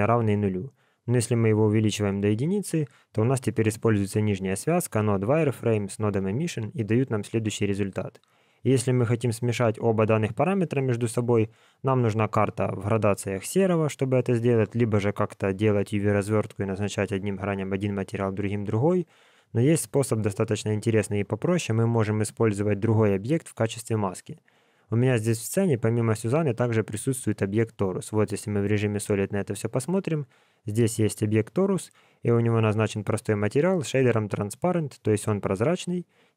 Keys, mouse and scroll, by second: 1.0 click, 5.0 click, 5.5 click, 6.3 alt+a, 9.6 click, 19.2 click, 27.0 click, 29.0 click, 32.8 click.